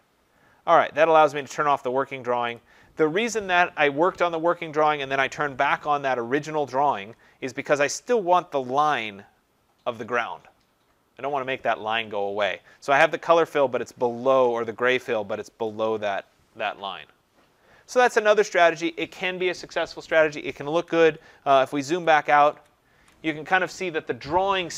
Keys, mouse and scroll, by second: 1.5 click, 2.6 click, 18.7 click, 21.9 ctrl+-, 22.2 ctrl+-, 22.5 ctrl+-, 22.9 ctrl+-.